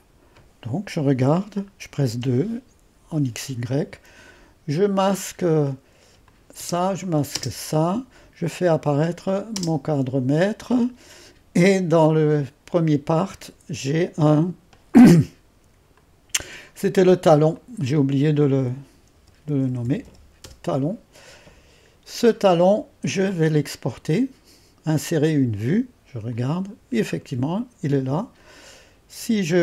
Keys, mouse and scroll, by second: 0.0-2.2 drag, 2.2 2, 6.3-13.3 drag, 7.4 space, 9.6 space, 16.0-18.6 drag, 18.6 F2, 18.9-20.6 typing, 25.2-27.1 drag, 27.1-29.6 scroll down 1.